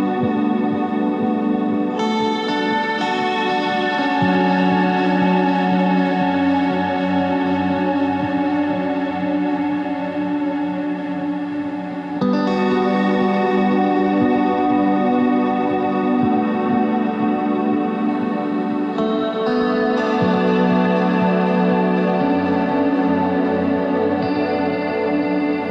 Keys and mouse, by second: 1.2 s, 2.3 middle click, 4.3 KP_1, 10.9 KP_1, 11.8 shift+a, 12.4 s, 17.8 Tab, 18.5 ctrl+Tab, 18.6 z, 22.5 e, 25.5 e.